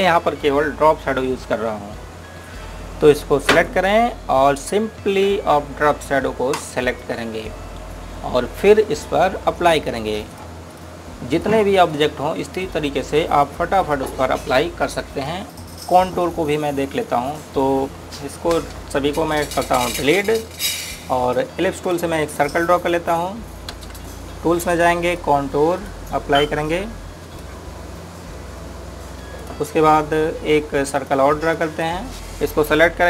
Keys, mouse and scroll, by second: 4.5 click, 7.9 click, 10.6 click, 17.1 click, 19.6 space, 19.9 scroll down 1, 20.4 click, 21.2 Delete, 21.5 scroll up 1, 22.2 scroll down 1, 22.9 click, 24.3 scroll up 1, 24.8 space, 26.0 click.